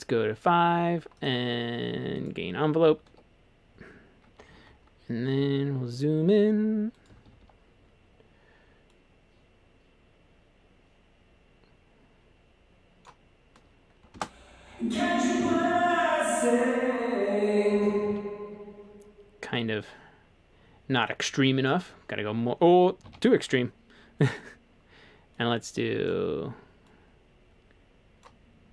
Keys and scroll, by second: 3.1 Escape, 5.4 e, 7.1 typing, 14.2 space, 17.8 space, 18.1 super+z, 23.1 super+z.